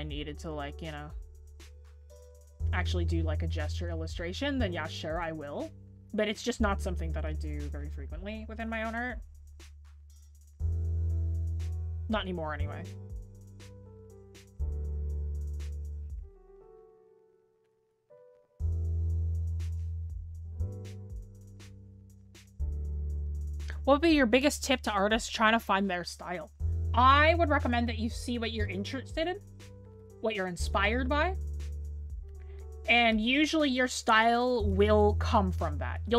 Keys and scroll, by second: 11.7 scroll down 1, 12.4 scroll up 1, 16.3 scroll down 1, 18.3-18.7 scroll up 1.